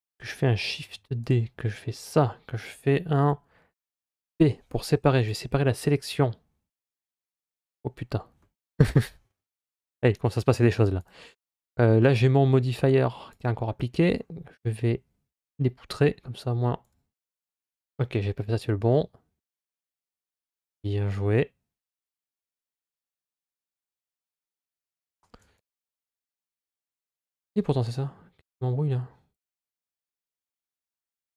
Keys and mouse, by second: 0.6 shift+d, 3.9 p, 8.2 middle click, 10.8 click, 13.2 click, 15.2 click, 16.7 click, 18.2 ctrl+z, 18.6 ctrl+z, 19.3 ctrl+z, 19.9 ctrl+z, 22.9 ctrl+y, 24.0 ctrl+shift+z, 29.1 click, 30.7 click.